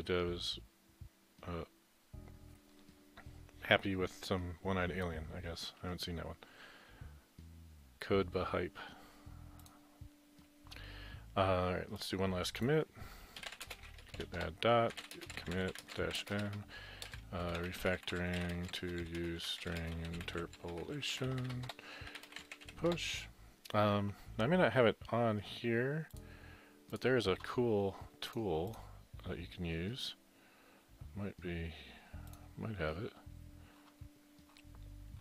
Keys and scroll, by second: 13.2-23.5 typing, 21.8 Return, 26.8-28.6 typing.